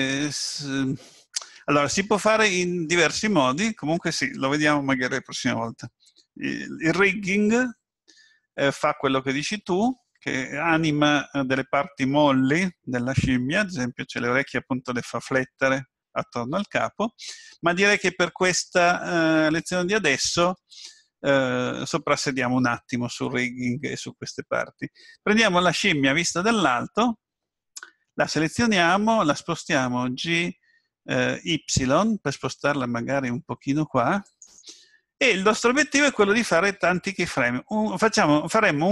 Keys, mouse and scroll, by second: 17.0-18.2 scroll up 6, 18.2-19.0 scroll down 7, 25.0-25.6 scroll up 4, 26.4 scroll down 3, 30.3 g.